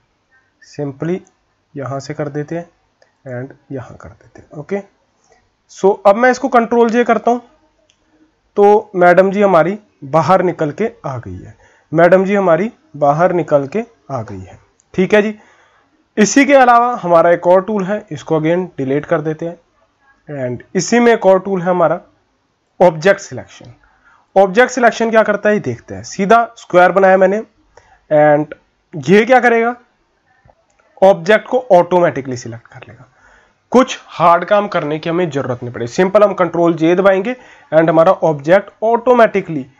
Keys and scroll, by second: 7.0 ctrl+j, 13.3 ctrl+-, 16.6 ctrl+z, 36.3 ctrl+j.